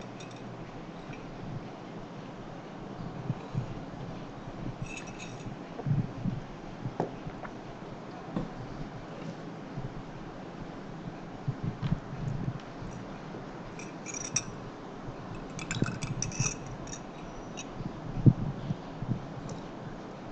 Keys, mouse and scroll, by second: 19.6 click.